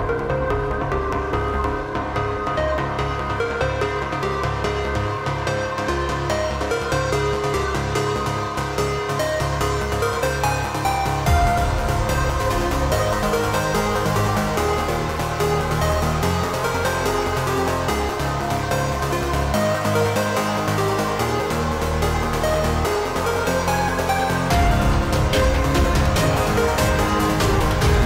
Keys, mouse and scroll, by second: 2.9 shift+m, 3.0 a, 3.1 i, 3.2 n, 4.0 Return, 4.8-6.8 middle drag, 6.8-9.2 drag, 9.5 ctrl+c, 9.8 click, 10.4 ctrl+v, 11.0-12.1 typing, 11.1 click, 13.3-13.8 typing, 14.6-19.7 drag, 19.9 shift+m, 25.0 a, 27.0 i, 27.2 n, 27.8 Return.